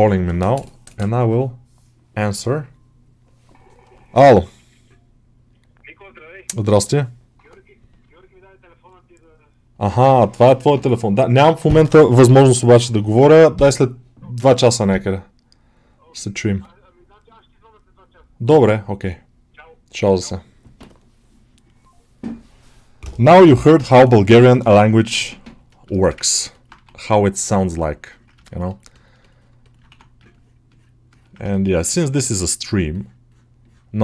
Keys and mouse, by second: 25.6 alt+middle click, 25.9 shift+middle click, 26.1 ctrl+middle click, 26.4 alt+middle click, 27.7 click, 28.3 middle click, 28.8 alt+shift+middle click, 29.1 middle click, 29.5 middle click, 30.5 click, 31.4 shift+middle click, 31.6 middle click, 32.1-34.0 drag.